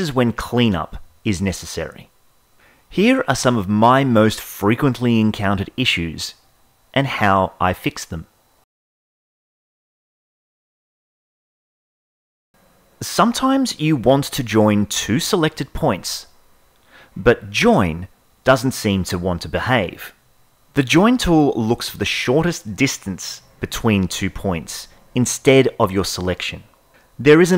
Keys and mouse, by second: 2.8 Tab, 2.8 a, 3.0 middle click, 5.4-9.1 shift+middle drag, 18.0 ctrl+j.